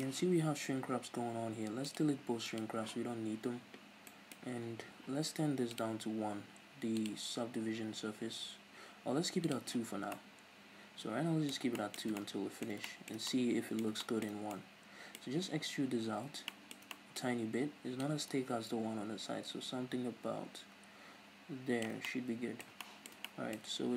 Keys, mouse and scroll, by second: 1.8 click, 2.5 click, 3.2-3.6 scroll up 1, 4.2-5.7 middle drag, 5.7 click, 7.0 click, 9.4 click, 10.1-23.9 middle drag, 17.9-22.0 drag, 23.7-23.9 scroll up 2.